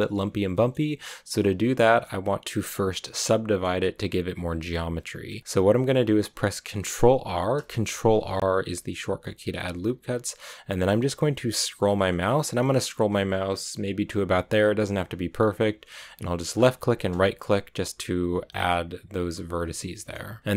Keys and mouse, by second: 0.4 click, 1.7 click, 3.1 click, 7.8 ctrl+r, 20.4 click.